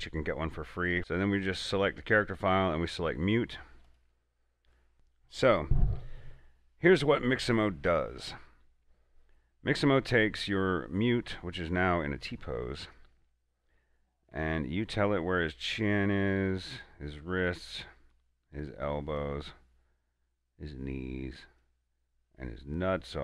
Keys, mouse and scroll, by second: 1.7 click, 1.7 click, 3.1 scroll down 1, 4.2 click, 4.4 click, 13.1-23.2 drag.